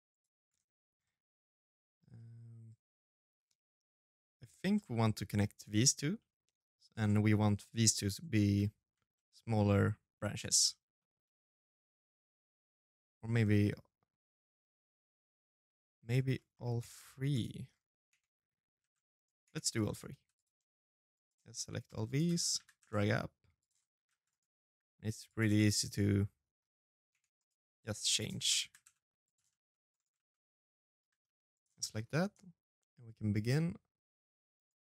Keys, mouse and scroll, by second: 1.0 middle click, 4.9 middle click, 6.7 middle click, 7.3 shift+middle click, 7.6 shift+middle click, 7.8 scroll down 1, 7.9 middle click, 10.0 middle click, 10.1 shift+middle click, 13.4 middle click, 14.8 right click, 15.1 middle click, 15.6 Tab, 15.6 scroll up 1, 16.1 right click, 16.1-16.4 scroll up 3, 16.4-16.8 scroll down 3, 16.8 Tab, 17.5 shift+z, 17.9 right click, 18.2 Tab, 18.7 right click, 18.9 c, 21.1 shift+z, 21.3 g, 22.9 shift+z, 23.0 right click, 23.4 g, 24.2 shift+z, 24.4 middle click, 25.9 Tab, 26.1 right click, 26.4-29.7 typing, 29.1 middle click, 30.5 middle click, 32.1 click, 33.3 right click, 34.4 right click, 34.4 shift+d.